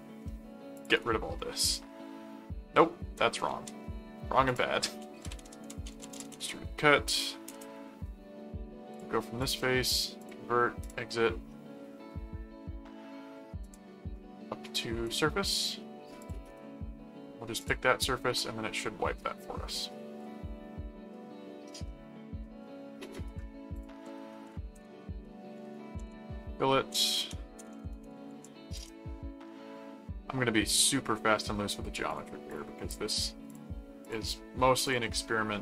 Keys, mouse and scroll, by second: 0.8 click, 0.9 right click, 1.6-2.8 middle drag, 3.5 ctrl+z, 4.5 click, 4.9-6.9 typing, 7.5 Return, 8.9 click, 10.2 click, 10.8 click, 13.6 click, 15.1 click, 16.2 click, 16.5 right click, 17.6 click, 18.8-23.6 middle drag, 23.7 click, 23.8-28.8 typing, 30.5 middle click, 32.1 click, 33.5 click, 34.8 click, 35.0-35.6 middle drag.